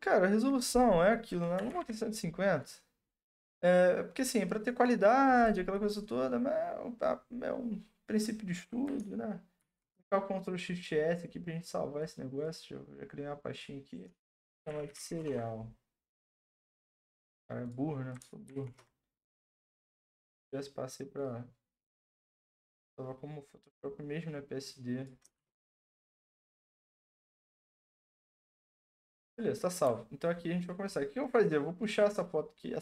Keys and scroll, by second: 1.3-2.3 typing, 7.4-8.1 typing, 9.6 ctrl+shift+s, 14.0-15.9 typing, 18.5 ctrl+shift+s, 18.7-19.4 typing, 25.1-26.6 typing.